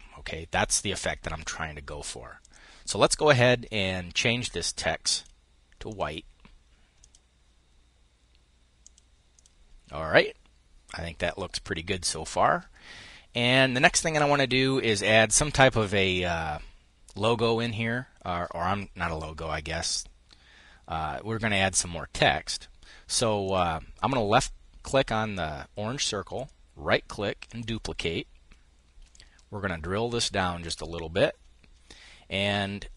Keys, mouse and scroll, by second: 1.9 click, 4.3-6.6 drag, 8.3-9.3 drag, 23.0 click, 28.7-30.5 ctrl+shift+drag.